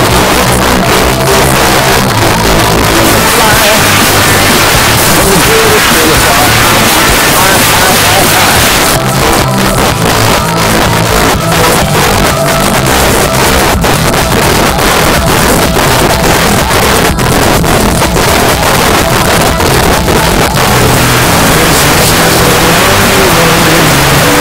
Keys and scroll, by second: 8.7 Page_Down.